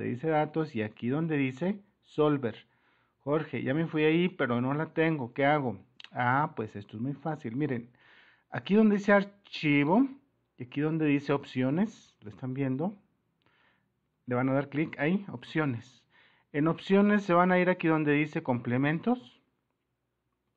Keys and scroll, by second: 1.2 super++, 2.8 super+-, 14.3 super+-, 18.8 super++.